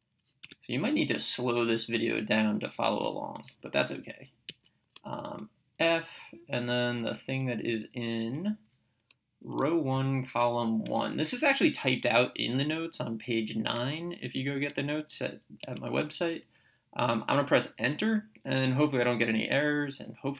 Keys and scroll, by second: 0.5 Return, 3.0 y, 4.5 Right, 5.8 f, 8.4 (, 9.6 1, 10.0 ,, 10.9 1, 14.4 Right.